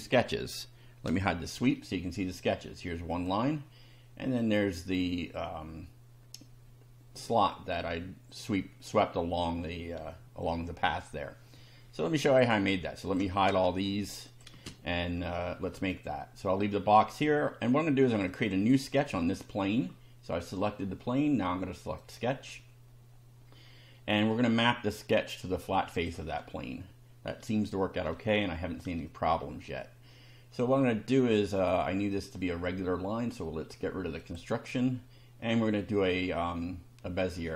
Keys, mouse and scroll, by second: 1.2 space, 3.1 click, 4.2 click, 10.1 shift+middle click, 12.2 click, 13.0 shift+click, 13.5 shift+space, 14.3 click, 14.5 space, 15.2-15.9 shift+middle drag, 18.3 click, 22.0 click, 26.0 click, 27.3-28.3 shift+middle drag, 29.0-29.8 shift+middle drag, 34.2 click.